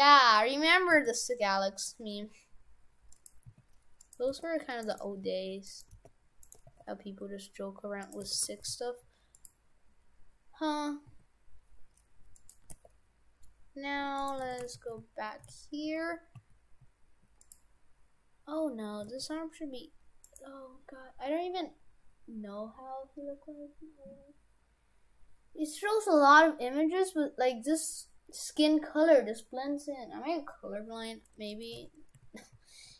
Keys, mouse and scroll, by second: 0.9 s, 3.4-6.6 typing, 8.3 shift+f, 11.1 s, 12.7 g, 14.5 shift+f, 19.0 s, 31.6 middle click, 31.8 shift+f.